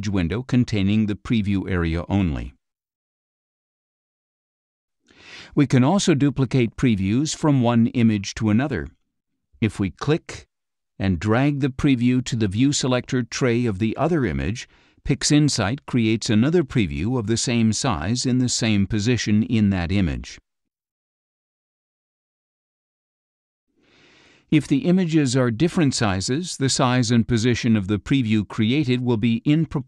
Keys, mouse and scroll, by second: 4.0 click, 6.6 click, 10.1 click, 11.3-16.0 drag, 17.9 click, 23.1 click, 27.4 click.